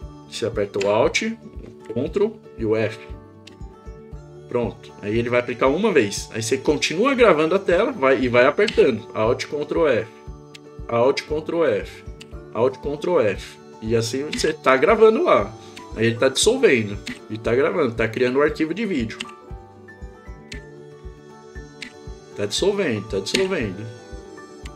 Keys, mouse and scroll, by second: 3.5 ctrl+alt+f, 8.7 ctrl+alt+f, 14.3 ctrl+alt+f, 15.8 ctrl+alt+f, 17.1 ctrl+alt+f, 19.2 f, 20.5 ctrl+alt+f, 21.8 ctrl+alt+f, 23.3 ctrl+alt+f, 24.6 ctrl+alt+f.